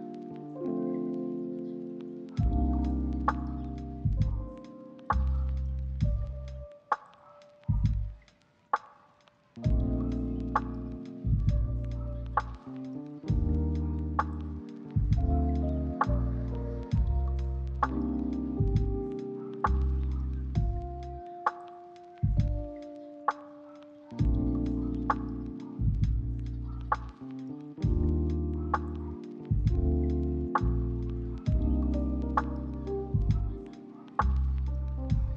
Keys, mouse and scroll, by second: 1.3 ctrl+middle click, 1.5 middle click, 1.7 shift+middle click, 1.9 ctrl+middle click, 2.3 double click, 3.9 s, 4.4 middle click, 4.7 double click, 9.7 right click, 11.1 double click, 13.9 right click, 16.6 3, 16.7 0, 16.8 Return, 17.3 double click, 26.9 ctrl+middle click, 27.8 shift+middle click, 27.9 ctrl+middle click, 28.2 middle click, 28.6 right click, 29.0 s, 29.1 s, 29.3 right click, 30.5 1, 30.5 0, 30.7 Return, 31.3 8, 31.4 Return, 31.9 ctrl+middle click, 32.1 shift+middle click, 33.0 ctrl+z, 33.2 ctrl+z, 33.5 double click.